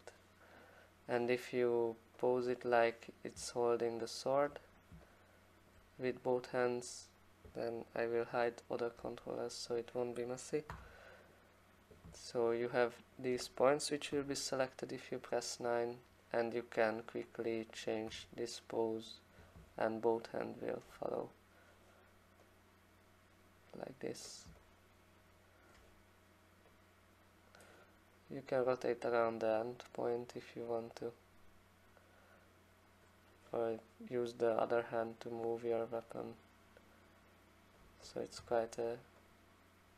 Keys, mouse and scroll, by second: 2.3 click, 4.4 alt+click, 5.7 alt+click, 6.6 click, 6.7 click, 9.0 9, 10.7 v, 11.3 click, 13.1 alt+click, 14.1 9, 17.1 click, 18.1 e, 20.8 alt+right click, 24.2 click, 25.7 alt+click, 27.6 click, 28.8 click, 33.0 click, 34.9 click, 37.8 click, 38.4 w.